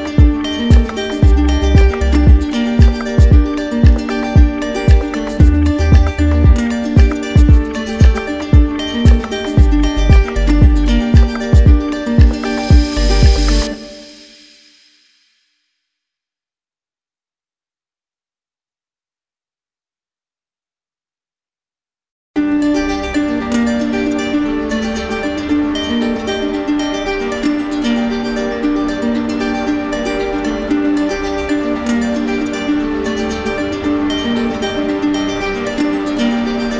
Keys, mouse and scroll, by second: 0.1 click, 0.2 click, 0.6 alt+click, 0.6 click, 0.7 shift+click, 0.9 ctrl+z, 0.9 click, 1.2 click, 1.4 ctrl+z, 1.4 click, 1.6 ctrl+click, 1.6 d, 1.9 shift+click, 1.9 alt+click, 2.1 click, 2.2 ctrl+d, 2.3 ctrl+d, 2.3 click, 2.5 click, 2.6 alt+click, 2.8 click, 2.8 click, 2.9 click, 3.0 click, 3.2 ctrl+z, 3.4 d, 3.6 ctrl+click, 3.6 alt+click, 3.6 click, 3.8 click, 4.0 shift+click, 4.1 shift+click, 6.4 d, 7.4 shift+click, 8.0 shift+click, 8.8 d, 10.5 shift+click, 11.2 shift+click, 12.4 click, 13.7 shift+click, 14.7 click, 15.2 click, 15.2 shift+click, 15.6 shift+click, 16.6 alt+click, 18.8 alt+click, 19.4 alt+click, 20.2 click, 21.1 alt+click, 23.0 click, 24.6 alt+click, 25.7-26.6 typing, 27.4 shift+click, 28.2 click, 29.0 alt+click, 30.8 ctrl+click, 31.2 ctrl+click, 31.5 w, 33.7 click, 34.3 ctrl+click, 36.0 ctrl+click, 36.4 ctrl+click.